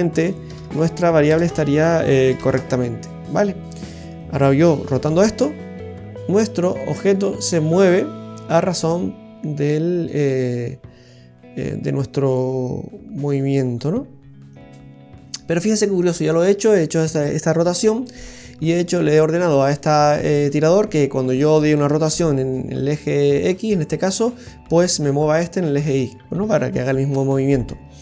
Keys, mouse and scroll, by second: 0.6 BackSpace, 0.7 BackSpace, 3.9 right click, 5.1 r, 22.0 r.